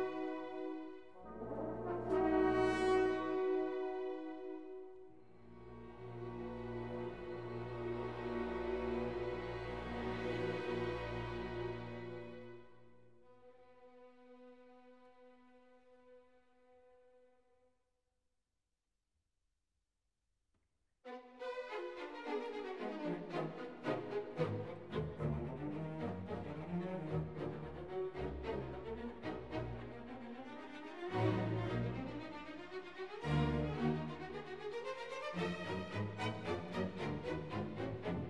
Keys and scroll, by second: 9.3 BackSpace, 9.9 7, 10.3 Return, 21.3 ctrl+s.